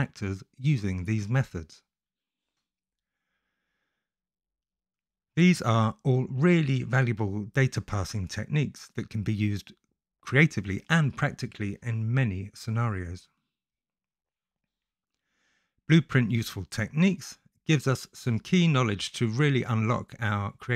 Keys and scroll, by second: 0.4-2.7 typing, 3.7 Right, 4.0 i, 4.9 ctrl+x, 5.2 i, 7.9 i, 8.2 F8.